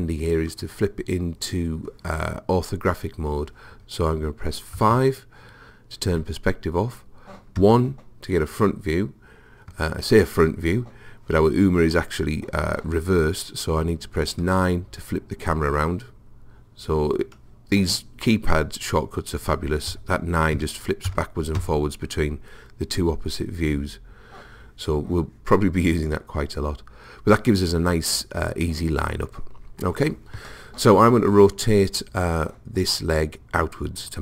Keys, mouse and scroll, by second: 4.8 KP_5, 7.6 KP_1, 14.5 KP_9, 19.9 KP_9, 20.6 KP_9, 21.1 KP_9, 21.6 KP_9.